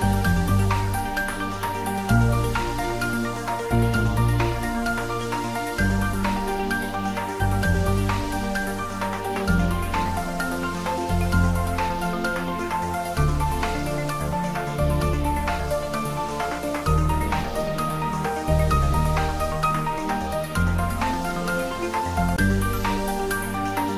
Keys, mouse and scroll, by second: 0.6 g, 1.5 click, 3.9-4.8 typing, 7.8 click, 8.8 g, 9.2 y, 10.1 Left, 14.3 click, 14.8 space, 16.4 g, 17.6 y, 18.3 Right, 20.4 click, 20.9-21.5 scroll down 1, 23.0-23.9 middle drag.